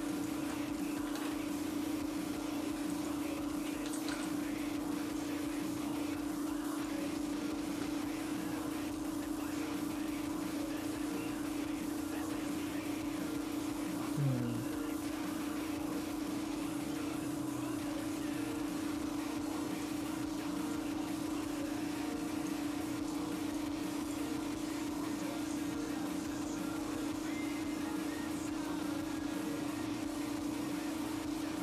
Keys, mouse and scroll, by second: 3.3 click, 5.7 click, 20.7 click, 22.8 click, 24.1 click, 25.5 click.